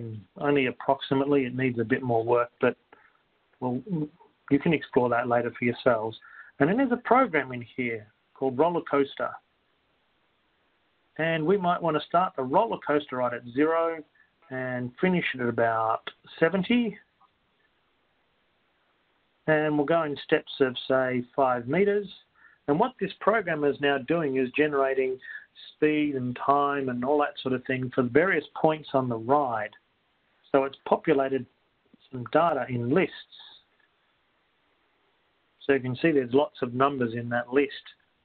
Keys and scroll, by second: 0.6 ×, 0.6 ÷, 7.6 *, 7.6 /, 9.1 1, 10.6 Return, 13.1-14.1 typing, 14.6 Return, 16.6 7, 17.9-18.8 typing, 19.1 Return, 21.4-22.1 typing, 34.3 Return.